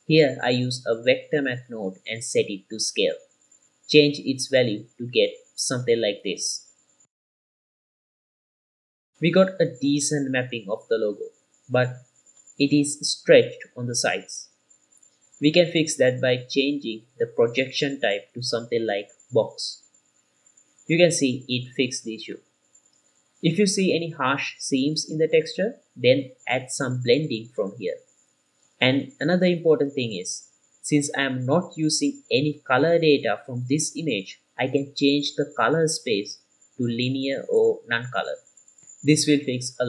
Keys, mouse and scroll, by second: 1.6-2.0 drag, 2.8 click, 4.0-9.0 drag, 11.6-13.8 middle drag, 14.1-14.7 middle drag, 15.7-16.7 scroll up 2, 16.7 click, 18.0-21.0 drag, 21.5-26.3 middle drag, 26.9-28.0 drag, 30.4-31.5 scroll up 1, 35.1 middle click, 35.1 scroll down 1, 36.7 click, 37.5-38.3 drag.